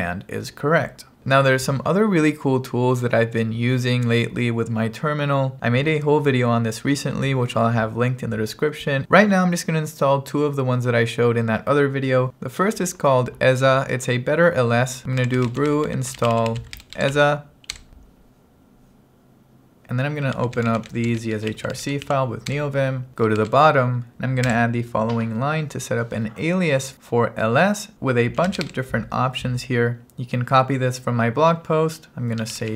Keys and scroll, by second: 15.0-17.7 typing, 17.8 Return, 20.2-22.6 typing, 22.6 Return, 23.8-25.0 typing, 27.7-30.0 typing, 32.3-32.7 typing.